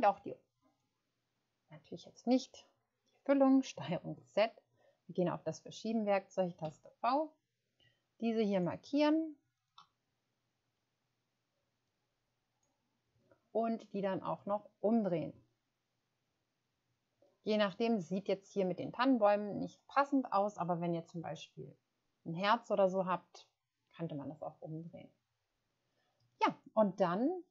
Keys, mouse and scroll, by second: 3.9 ctrl+z, 6.6-9.7 typing, 7.6-10.1 middle drag.